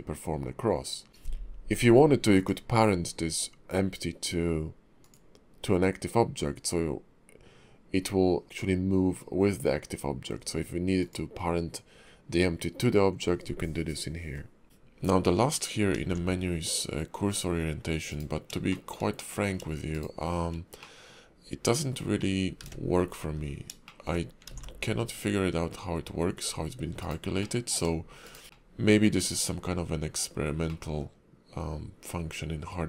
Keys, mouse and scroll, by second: 2.4 click, 11.0 click, 14.6-15.7 scroll down 5, 15.9 alt+x, 18.7 shift+middle click, 19.1 middle click, 19.9 shift+right click, 20.8 middle click, 22.6 `, 23.3 KP_5, 23.8 shift+middle click, 24.5 alt+x, 27.4 middle click, 28.2 shift+right click, 28.4 shift+middle click, 28.4 scroll up 3, 28.5 middle click, 30.7 middle click.